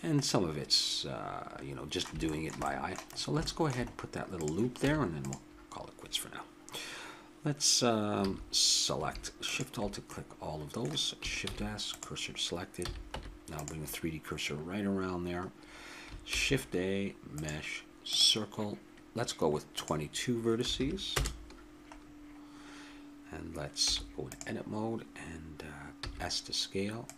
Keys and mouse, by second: 0.3-3.6 middle drag, 4.4 click, 4.4 right click, 4.8 Tab, 8.1 a, 9.4-10.6 right drag, 10.0 click, 11.5 shift+s, 12.8 a, 13.1 Tab, 16.2 shift+a, 19.8 click, 20.7 2, 22.0 middle click, 22.2-23.9 middle drag, 23.9 Tab, 26.0 s.